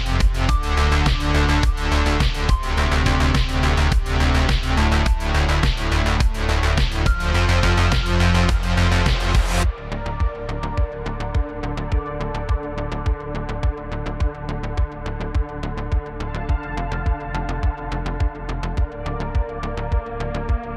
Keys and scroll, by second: 1.1-1.8 typing, 4.5-6.2 typing, 9.9 space, 12.6 space, 17.3 super+z, 17.4 super+z, 17.5 space, 17.6 space.